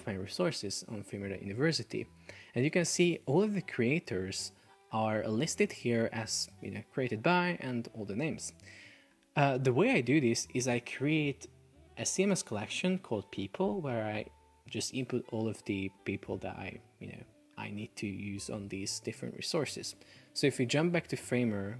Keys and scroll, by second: 20.1 super+Tab.